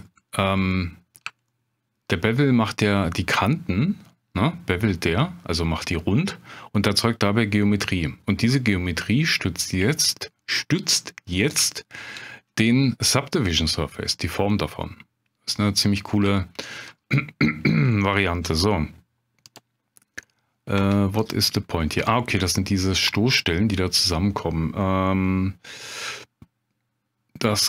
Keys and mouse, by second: 0.7-1.2 middle drag, 1.5-2.0 shift+drag, 11.8-12.1 shift+drag, 13.6-15.7 middle drag, 16.4-16.8 shift+middle drag, 18.0-18.4 shift+drag, 19.5 click, 20.8 Tab, 21.2 click.